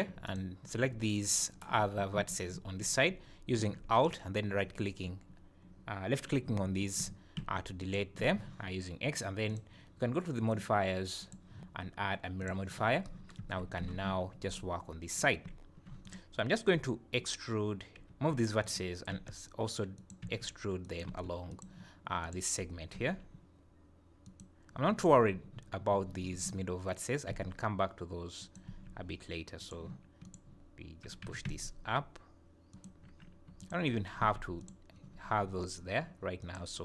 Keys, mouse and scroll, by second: 0.2 alt+click, 8.0 x, 8.2 Tab, 9.5 click, 11.2 click, 13.4 Tab, 13.8 z, 14.5 click, 16.0 click, 18.1 g, 19.1 e, 20.2 e, 21.1 e, 22.2 click, 22.9 g, 27.3 e, 28.6 e, 30.2 click, 31.2 g, 33.6 alt+click, 34.2 x, 36.4 click.